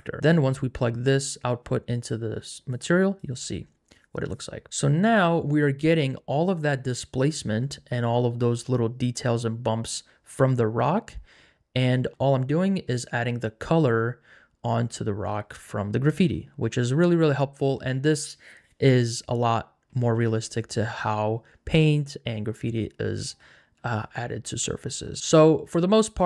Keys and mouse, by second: 0.5 click, 2.8 click, 15.5 middle click, 15.8-17.1 middle drag, 22.6 middle click, 23.8 shift+middle click.